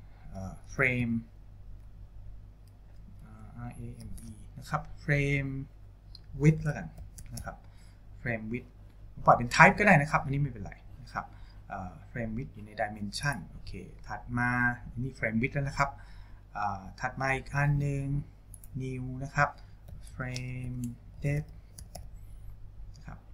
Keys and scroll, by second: 1.0 r, 1.8 a, 4.2 e, 6.5-8.0 typing, 19.9-22.5 typing.